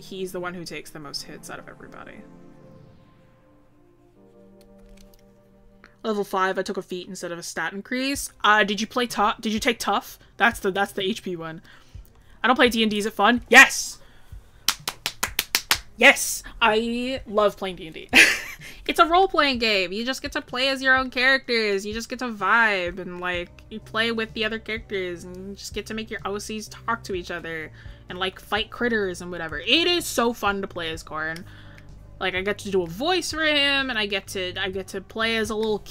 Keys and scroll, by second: 21.1 ctrl+z.